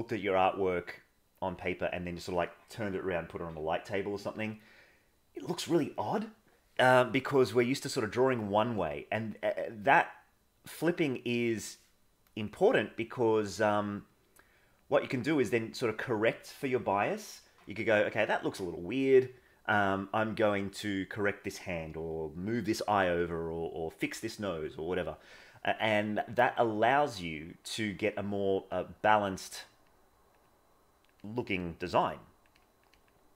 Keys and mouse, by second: 1.6 click, 7.5 click, 8.8-11.6 drag, 13.4-14.8 drag, 14.9-16.4 drag, 26.3 click, 26.7 click, 27.9 click, 28.5 click, 28.8 click, 29.9 click, 30.4 click, 31.3 click, 31.7 click, 32.0 click, 32.6 click, 32.9 click.